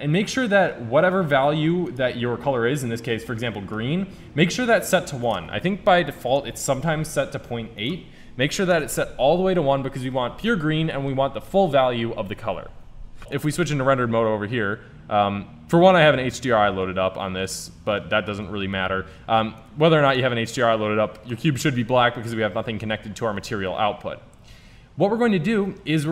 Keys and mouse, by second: 1.9-3.7 drag, 13.6 shift+z, 18.5-19.6 middle drag, 21.4 middle click, 23.8-25.4 middle drag, 25.4 shift+a.